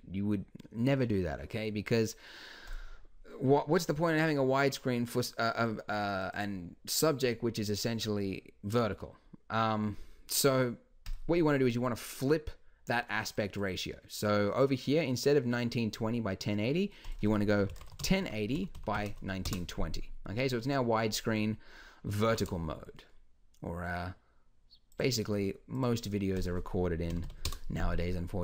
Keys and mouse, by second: 4.6-6.2 middle drag, 9.5-11.1 middle drag, 21.7 middle click, 22.3 g, 27.2 KP_5.